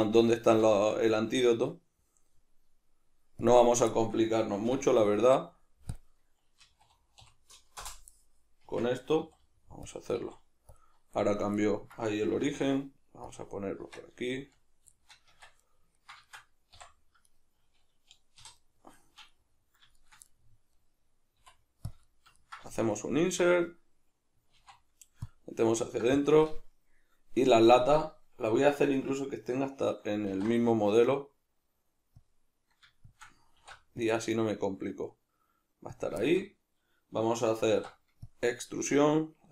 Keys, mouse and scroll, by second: 0.7 shift+a, 4.7 F9, 8.7 Tab, 9.2 s, 9.9 click, 10.2 s, 10.8 click, 11.6-13.4 ctrl+middle drag, 12.3 s, 13.4 click, 13.9 Tab, 14.4 z, 14.9-17.4 shift+middle drag, 15.3 Tab, 17.4 right click, 18.4 3, 18.6 right click, 19.0-20.0 shift+middle drag, 20.0 shift+right drag, 20.2-21.9 middle drag, 21.4 i, 21.9 click, 22.0-26.2 middle drag, 24.5 alt+e, 26.2 shift+click, 27.5-33.2 ctrl+middle drag, 30.3 alt+e, 33.2 shift+click, 33.6 alt+e, 36.1 click, 36.2-39.5 shift+middle drag, 37.7 alt+e.